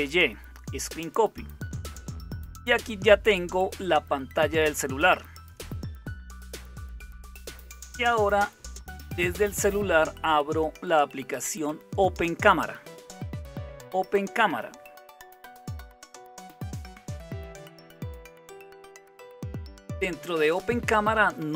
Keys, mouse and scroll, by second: 6.0 super+=.